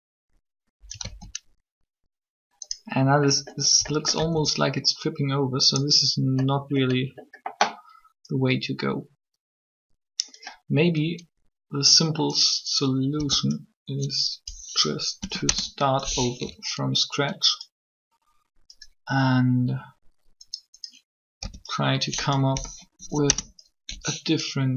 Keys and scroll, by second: 1.0 alt+a, 4.2 alt+a, 13.1 b, 15.2 Delete, 15.4 Return, 21.4 b, 22.9 Delete, 23.2 Return.